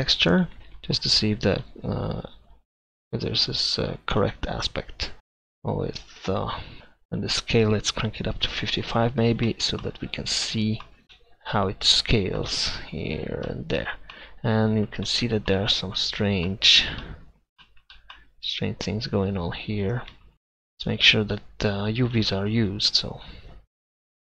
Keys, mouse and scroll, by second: 8.5 5, 11.0-11.5 middle drag, 20.1 Tab, 20.9-22.3 right drag, 23.0-24.3 middle drag.